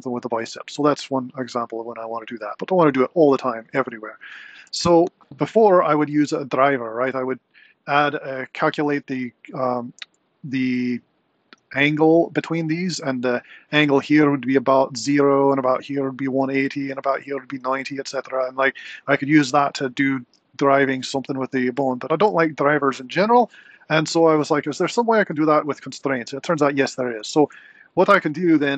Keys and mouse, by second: 12.1 r, 26.2 r.